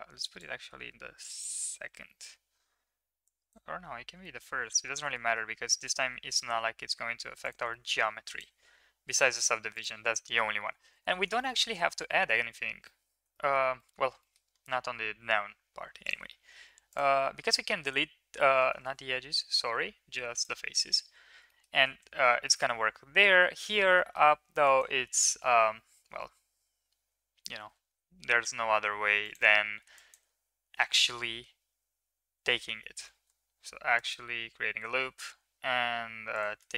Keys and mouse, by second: 0.3-1.4 drag, 0.3-1.4 right drag, 3.2-3.5 middle drag, 4.1 shift+middle click, 4.8 Tab, 5.1 shift+middle click, 5.9 ctrl+r, 7.8 middle click, 8.0 ctrl+r, 10.6 ctrl+z, 10.8 ctrl+z, 11.3 middle click, 11.5 middle click, 11.9 3, 13.3 shift+middle click, 13.7 middle click, 14.1 shift+middle click, 16.0 click, 16.8 click, 17.3 x, 18.7 ctrl+z, 19.5 x, 20.9 Tab, 21.4 middle drag, 22.4 middle drag, 22.6 Tab, 23.9 middle drag, 24.6 right click, 25.0 shift+middle click, 27.7 g, 33.0 ctrl+r.